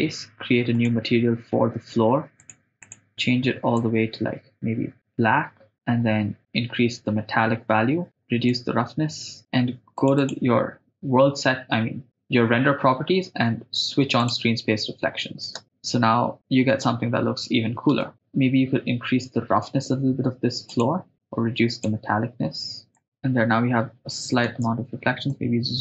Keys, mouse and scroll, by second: 0.8 click, 2.4 click, 2.8 click, 8.5-10.1 drag, 10.2 click, 14.3 click, 15.6 shift+space, 18.0 space, 18.1 right click, 20.7 click, 21.2 click, 23.0 click, 23.0 shift+space, 24.5 shift+space.